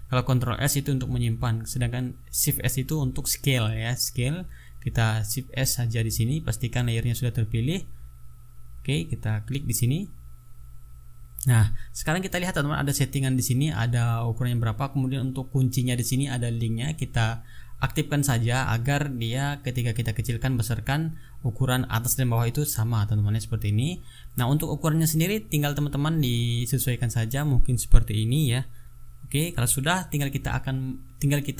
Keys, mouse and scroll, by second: 11.0 shift+s, 16.8 click, 17.9-25.3 drag, 26.2 click, 28.2 ctrl+scroll down 2, 28.9-29.2 ctrl+scroll up 2.